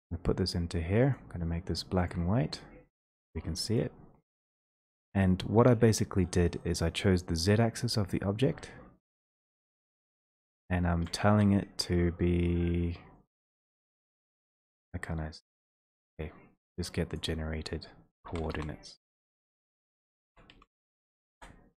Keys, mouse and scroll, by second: 0.5 click, 1.3-2.1 scroll, 2.1 scroll, 3.8 click, 11.1 shift+click, 11.3 ctrl+z, 15.8 ctrl+z, 17.1 click, 18.3-20.5 typing, 19.3 ctrl+a, 21.3 Return.